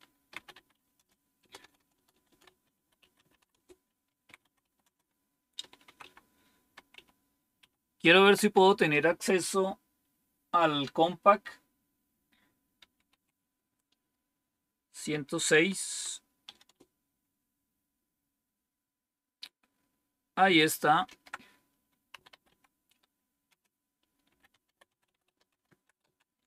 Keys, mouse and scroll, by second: 0.0-8.7 typing, 12.8 typing, 14.9-16.4 typing, 16.7 Return, 21.0 ctrl+c, 22.1-26.0 typing.